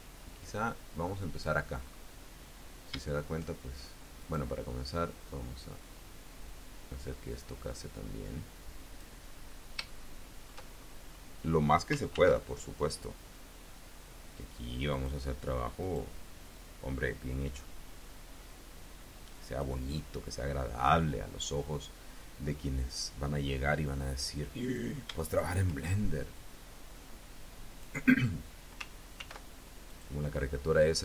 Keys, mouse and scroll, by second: 1.7 scroll up 1, 4.1 click, 5.1-9.0 drag, 9.3 scroll up 2, 9.7 shift+click, 10.5-11.1 shift+scroll up 3, 11.9 ctrl+r, 12.7 click, 14.8 click, 15.7 click, 16.3-19.6 drag, 20.5-21.1 scroll down 1, 24.5 click, 25.1 shift+click, 26.2-27.8 drag, 29.0 ctrl+r, 29.7 click, 30.8 click.